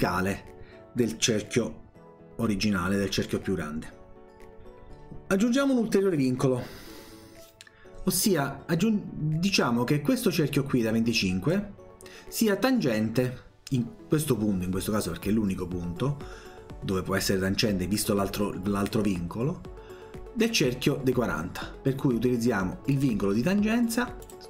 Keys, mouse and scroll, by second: 10.3-11.5 drag, 22.9 click, 24.2 click.